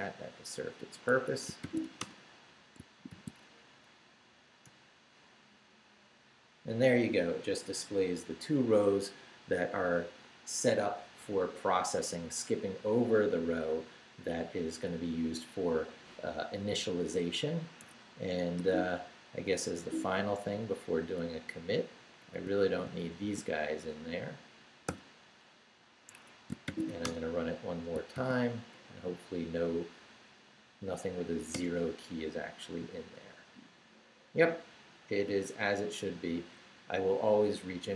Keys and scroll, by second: 1.1 Escape, 1.4-2.3 typing, 2.8 shift+Return, 3.6 shift+Up, 4.6 Return, 17.8 Escape, 18.6 p, 19.8 Down, 22.0 Up, 23.2 shift+v, 23.6 shift+Down, 24.9 d, 26.1 Escape, 26.4-28.1 typing, 27.9 shift+Return, 28.7 shift+Up, 31.5 Return.